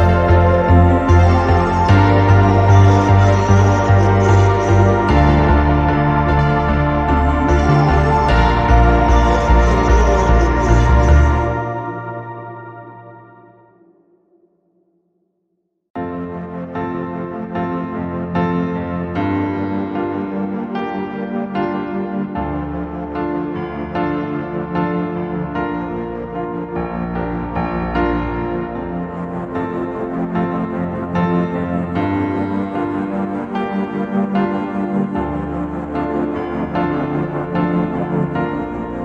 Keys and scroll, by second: 8.1 x.